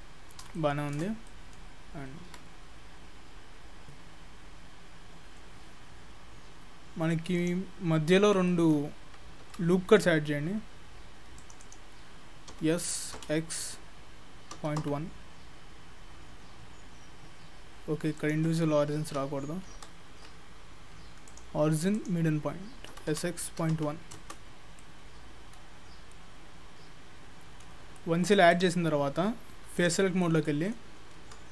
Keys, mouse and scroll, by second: 0.4 scroll up 2, 0.6 shift+middle click, 1.3 middle click, 8.5 middle click, 9.5 ctrl+r, 12.6 s, 21.3 click, 22.9 s, 24.8 middle click, 28.0 middle click, 28.5 click, 29.6 3, 29.8 click, 30.2 middle click, 30.9 scroll down 6.